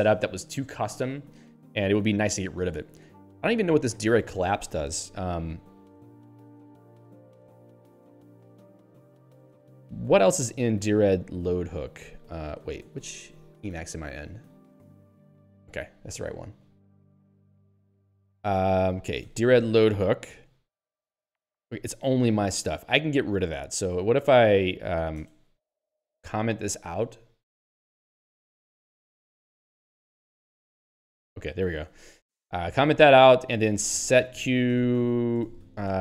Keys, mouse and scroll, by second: 0.8 Down, 2.8 Up, 6.3 Left, 9.3 ctrl+g, 10.3 ctrl+p, 11.9 ctrl+b, 14.8 ctrl+s, 20.8 Return, 22.8 q, 24.0 Home, 25.2 ctrl+space, 25.8 ctrl+n, 26.7 ctrl+/, 30.2 ctrl+;, 32.0 ctrl+s, 34.6 ctrl+g, 34.8 alt+:, 34.8-36.0 typing.